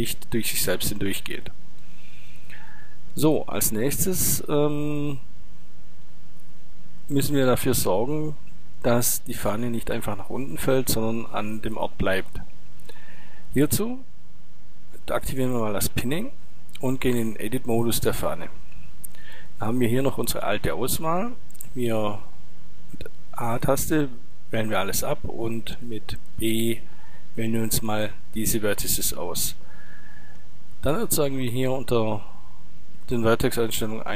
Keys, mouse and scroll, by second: 15.1-17.0 drag, 17.2 Tab, 19.2 click, 21.1 a, 25.2 b, 28.4 middle click, 31.2-33.2 drag.